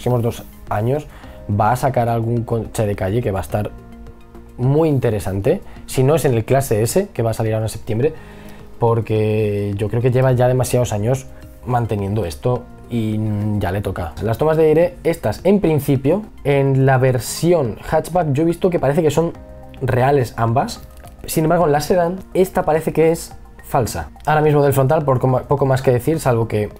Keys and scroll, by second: 25.1 b.